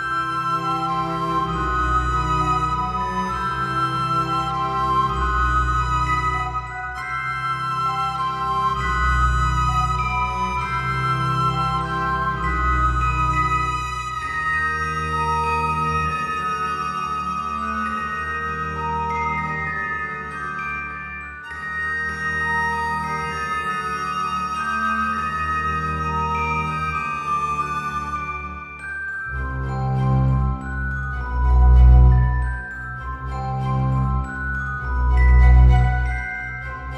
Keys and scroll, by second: 4.2 alt+x, 33.7 ctrl+z.